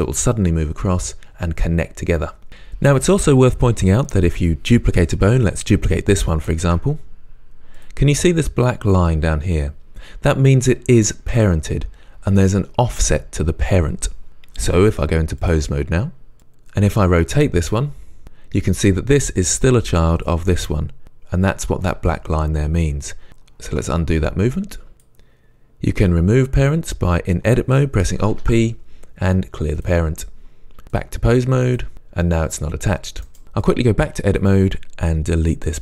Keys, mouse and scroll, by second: 4.1 click, 6.7 shift+d, 7.9 click, 15.5 click, 16.9 r, 18.2 click, 18.8 click, 20.2 click, 24.1 ctrl+z, 25.0-31.9 drag, 28.4 alt+p, 31.9 r, 33.7-35.5 drag.